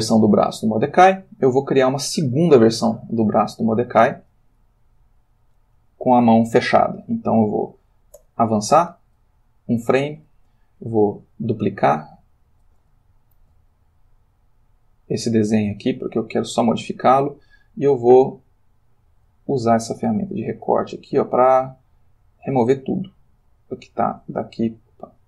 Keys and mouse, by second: 8.2 Right, 12.0 click, 13.4 shift+d, 15.0 click, 18.9 click, 23.6-25.0 drag.